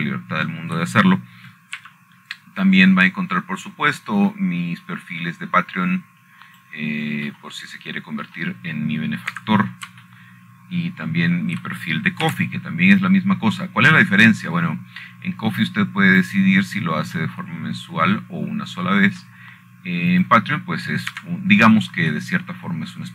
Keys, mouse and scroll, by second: 0.8 middle click, 1.3 Escape, 3.3 shift+middle click, 4.5 c, 5.4-9.4 drag, 10.2 middle click, 11.1 middle click, 12.1 Escape, 14.1 shift+middle click, 15.0 c, 15.8-19.0 drag, 20.0 middle click, 21.3 middle click, 22.1 middle click, 22.9 click.